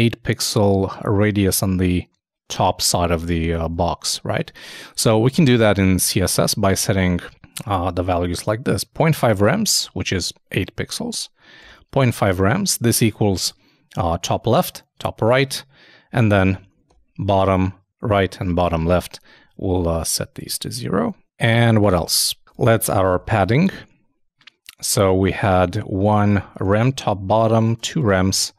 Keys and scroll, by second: 3.7 super+Tab, 19.5 super+s, 20.5 super+Tab, 20.9 super+i, 23.0-23.9 typing.